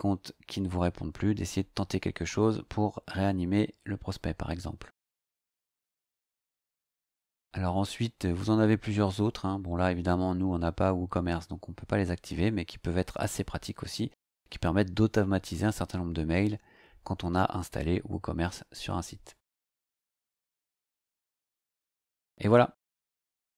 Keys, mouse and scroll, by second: 2.8 scroll down 2, 4.4 scroll down 2, 7.4 scroll down 2, 8.9-9.2 scroll down 2, 18.2 scroll up 2, 19.4-20.5 scroll up 3, 23.1 scroll down 2.